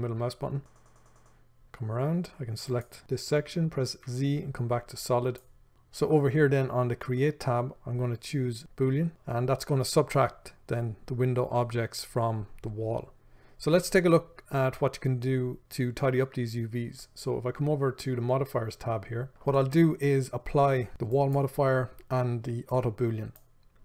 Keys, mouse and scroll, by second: 3.0 click, 5.6 z, 9.1 click, 21.6-23.8 drag.